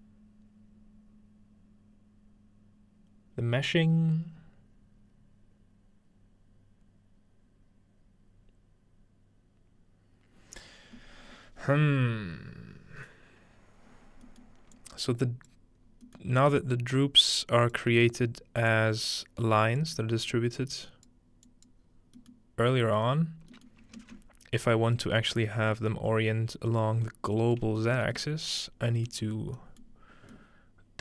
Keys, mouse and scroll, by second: 13.9-17.6 scroll up 3, 14.8-15.8 drag, 16.5 g, 17.6 click, 18.7-19.8 drag, 20.3 click, 21.5 click, 21.8-23.3 scroll down 2, 23.3-24.7 scroll down 1, 23.7-25.0 ctrl+middle drag, 24.0 ctrl+space, 25.2-25.7 ctrl+middle drag, 25.5 scroll up 2, 27.7 shift+middle click, 28.1 shift+middle click, 28.9-31.0 scroll up 2, 29.2-30.3 middle drag.